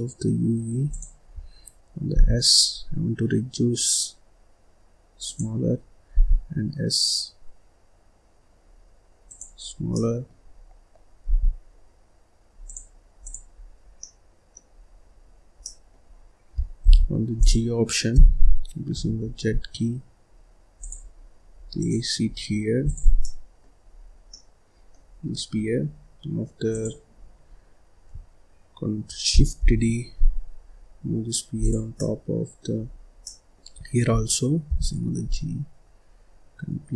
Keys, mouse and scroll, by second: 1.2-1.8 scroll up 2, 1.8 scroll down 1, 2.0 s, 5.6-6.0 scroll up 1, 6.0 s, 9.5-9.8 scroll down 2, 9.8 middle click, 10.4-11.1 scroll up 1, 11.1 s, 13.1 click, 13.4-13.8 scroll up 3, 13.8 scroll down 1, 13.9 middle click, 14.6-15.1 scroll down 3, 15.1-15.5 scroll up 1, 15.5 middle click, 16.1-16.7 scroll up 1, 16.7 g, 17.3 click, 18.0 g, 21.7 click, 22.2-22.8 scroll down 3, 22.8 click, 23.1 middle click, 23.8-24.1 scroll up 3, 24.1 scroll down 2, 24.2 middle click, 25.0-25.5 scroll down 3, 25.5-26.6 scroll up 3, 26.6 click, 27.1-27.4 scroll down 1, 27.4-28.0 scroll up 1, 29.5 shift+d, 31.9 middle click, 32.8-33.1 scroll up 1, 33.1 middle click, 33.6-34.0 scroll up 3, 34.0-34.6 scroll down 1, 34.6 g.